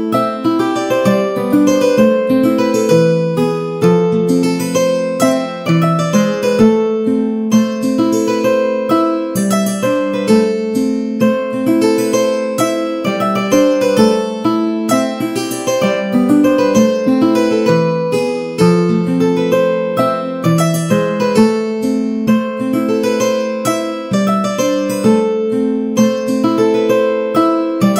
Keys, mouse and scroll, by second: 0.7 r, 2.9 middle click, 3.2 shift+middle click, 6.5 middle click, 7.7 shift+Tab, 8.2 g, 10.2 middle click, 10.6 a, 10.8 a, 13.4 middle click, 14.5 shift+d, 15.3 x, 16.5 shift+right click, 16.8 shift+a, 18.0 middle click, 18.4 r, 20.1 s, 22.8 shift+middle click, 23.5 middle click, 24.3 middle click, 24.6 shift+middle click, 26.7 shift+Tab.